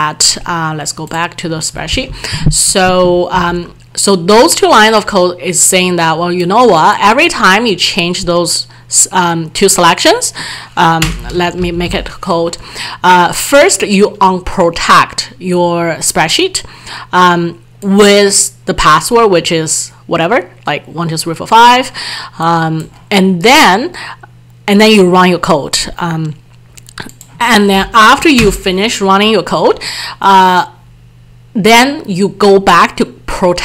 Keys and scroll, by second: 3.4 alt+Tab.